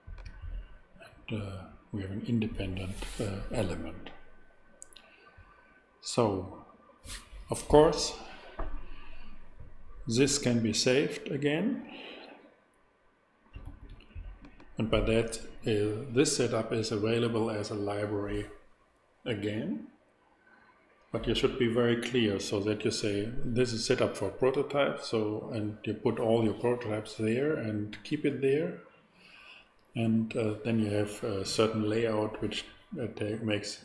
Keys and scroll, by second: 13.6 super+s.